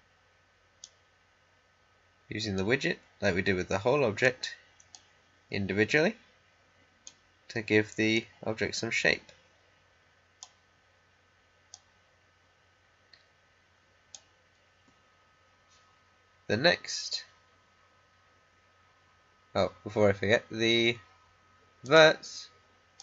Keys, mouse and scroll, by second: 21.8 click.